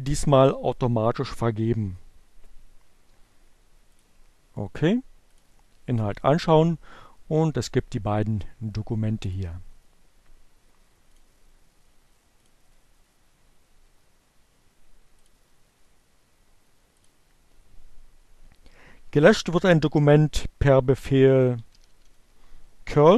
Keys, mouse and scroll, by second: 3.3 click, 5.0 click, 9.3 click, 11.6 click, 13.2 click, 16.2 click, 18.5 click, 20.8-21.9 typing.